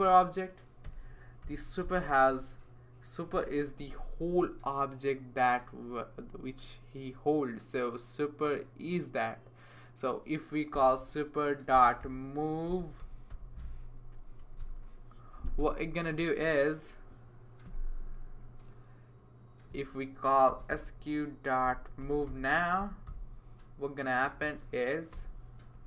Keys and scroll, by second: 0.8-3.8 typing, 5.0 typing, 10.5-14.9 typing, 16.1-16.8 typing, 20.2-24.7 typing, 25.1 Return.